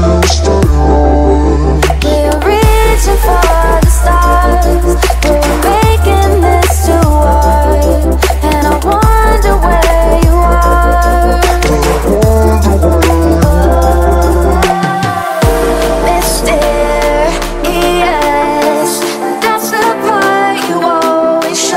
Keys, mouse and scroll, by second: 0.0-4.0 typing, 4.3 click, 7.5 typing, 7.6 Return, 8.7 click, 10.8-12.0 right drag, 12.3-16.2 drag, 16.2 Tab, 16.2 F10, 16.7 click, 17.5-18.9 typing, 19.4 Return, 20.2 click.